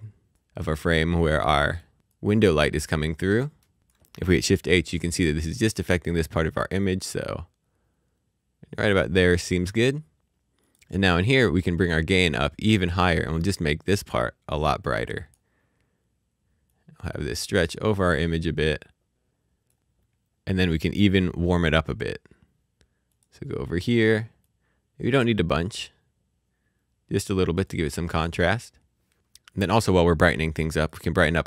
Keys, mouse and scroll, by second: 6.8 click, 9.4 shift+h, 10.6 click, 16.7 click, 23.2 click, 28.0-28.7 scroll up 1, 30.6 click.